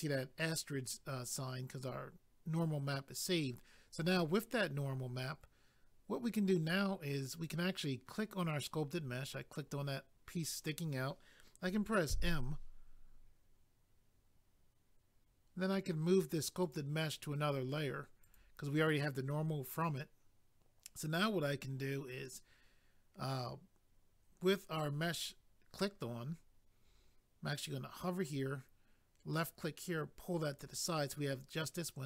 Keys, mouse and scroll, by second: 7.3 click, 7.4 click, 16.6 click, 28.3 click, 31.5 scroll down 1.